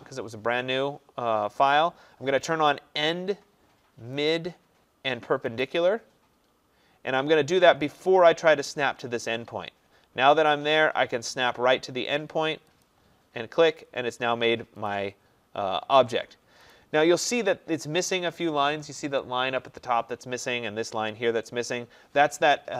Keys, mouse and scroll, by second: 2.7 click, 4.3 click, 12.9 click, 14.9 click.